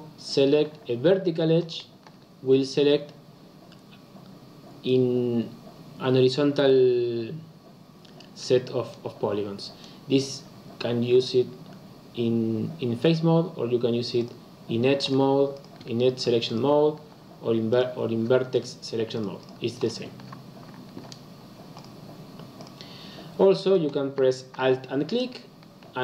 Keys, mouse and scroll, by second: 1.5 alt+click, 14.1 click, 14.9 alt+click, 15.4 alt+click, 16.1 alt+click, 16.4 alt+click, 17.6 click, 18.5 alt+click, 19.0 alt+click, 19.3 alt+click, 19.7 alt+click, 21.7 click, 22.5 click, 23.6 alt+click.